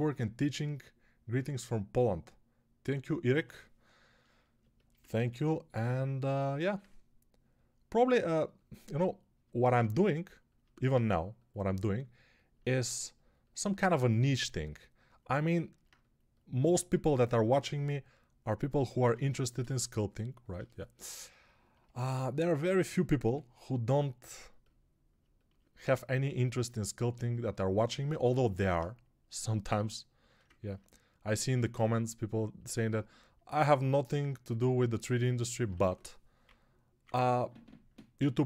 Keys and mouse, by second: 4.7-38.4 ctrl+alt+shift+drag, 17.3 shift+r, 18.9 ctrl+r, 23.1 g, 35.6 1, 36.3 [, 36.8 [, 36.9 [.